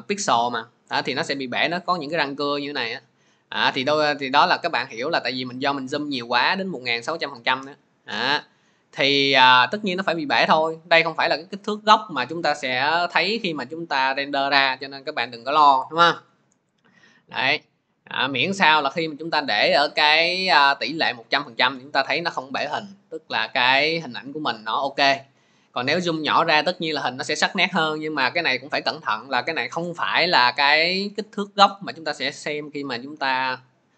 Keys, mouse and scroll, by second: 4.4-5.2 scroll, 8.1 scroll, 8.8 scroll, 9.3-9.7 scroll, 10.4-11.0 scroll, 14.8 scroll, 16.8 scroll down 1, 17.0-17.7 scroll, 18.4-19.0 scroll down 1, 20.5 click, 23.1 middle click.